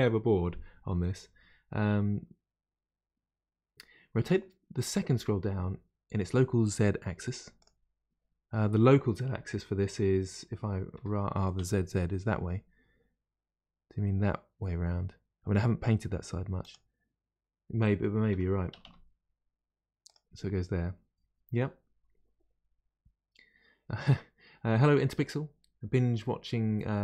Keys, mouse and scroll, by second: 7.6 click, 10.9 r, 18.3 r.